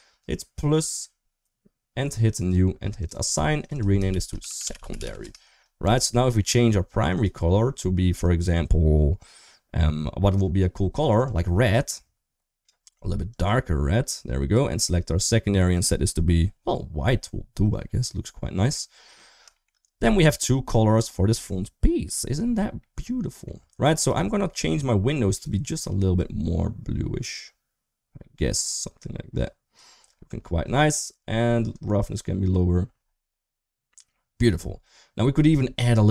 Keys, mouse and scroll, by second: 0.5 click, 2.1 click, 2.7 click, 2.9 click, 3.3 click, 3.5-5.0 shift+drag, 5.6 Tab, 5.9 middle click, 6.9 click, 10.0 click, 15.5 click, 16.8-18.4 middle drag, 19.3 shift+middle click, 19.9 middle click, 20.4 click, 22.5 middle click, 23.7 click, 24.1 middle click, 25.1 click, 31.5 click.